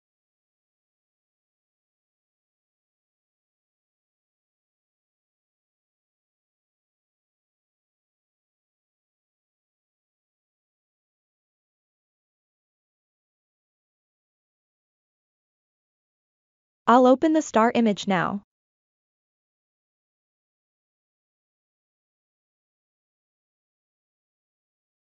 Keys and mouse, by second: 2.0 ctrl+KP_7, 5.4-8.8 drag, 9.7 middle click, 10.5 ctrl+middle click, 11.0 ctrl+middle click, 11.5 middle click, 12.5 shift+middle click, 20.9 KP_3, 22.5 shift+middle click.